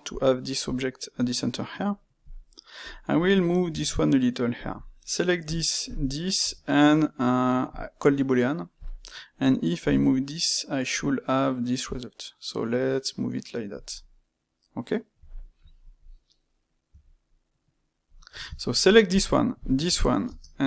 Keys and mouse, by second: 0.2-2.3 middle drag, 2.7 click, 3.7 g, 5.8 shift+click, 6.4 space, 13.9-16.8 middle drag, 16.8 g, 18.3-19.5 ctrl+shift+middle drag, 19.5 shift+click, 20.2 space.